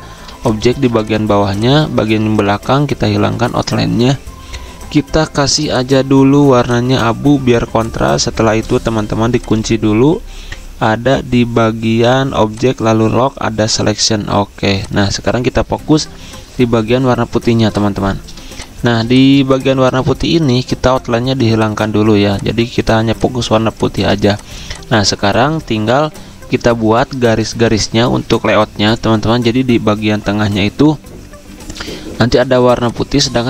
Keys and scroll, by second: 0.6-2.0 typing, 16.8 z, 18.4 space, 19.8 v, 22.8 z, 24.5 z.